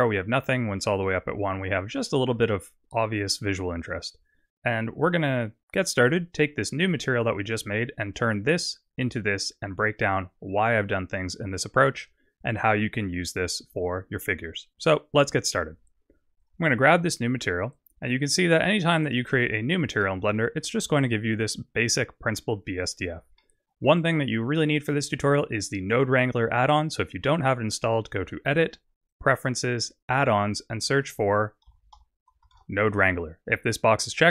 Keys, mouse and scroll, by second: 9.7-10.1 scroll down 3, 15.6 click, 16.4 click, 18.0-18.7 scroll down 1, 18.7 middle click, 18.7 scroll down 3, 19.6-20.0 scroll up 5, 20.1 middle click, 20.6 scroll up 4, 23.5 middle click, 28.1 click.